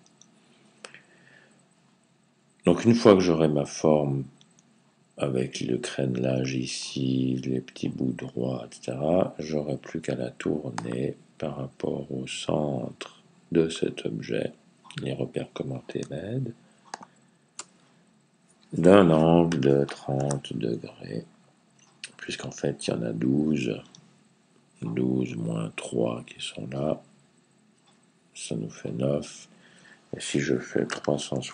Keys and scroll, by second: 19.4-20.1 typing, 30.5-31.5 typing.